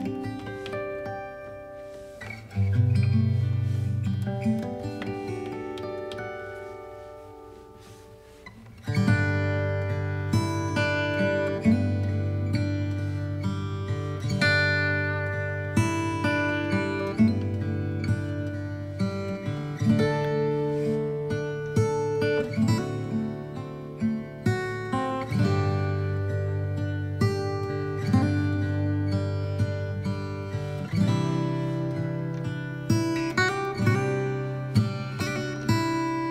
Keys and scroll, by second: 14.1 b, 19.7 ctrl+d, 34.6 b, 35.3 x.